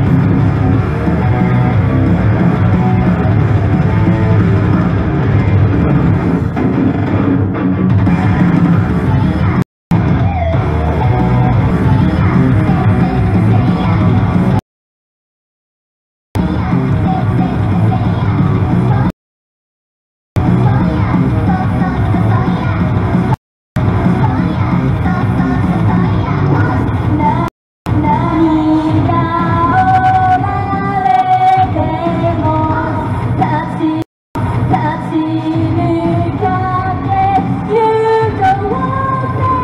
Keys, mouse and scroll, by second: 9.6 right click, 9.9 space, 11.2 Return, 11.7 space, 14.6 right click, 16.1 Return, 16.4 space, 19.1 right click, 20.0 Return, 20.4 space, 23.4 right click, 23.6 Return, 23.8 space, 27.5 right click, 27.7 Return, 27.9 space, 34.0 right click, 34.2 Return, 34.4 space.